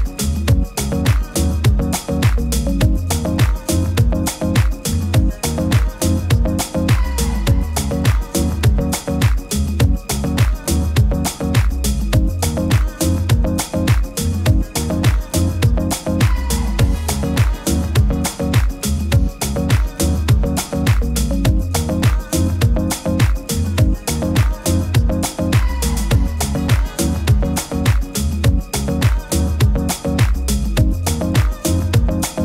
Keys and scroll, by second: 0.4 super+-, 4.2 super+s, 18.4 super+t, 20.5 super+t, 24.8 super+t.